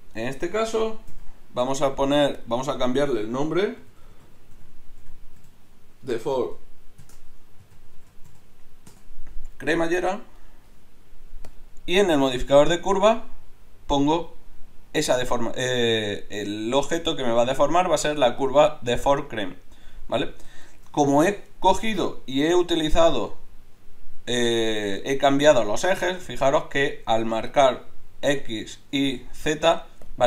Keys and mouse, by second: 0.1-4.4 drag, 1.1 n, 10.3-11.5 drag, 11.5-13.1 middle drag, 13.1-20.7 drag, 22.0-30.2 drag.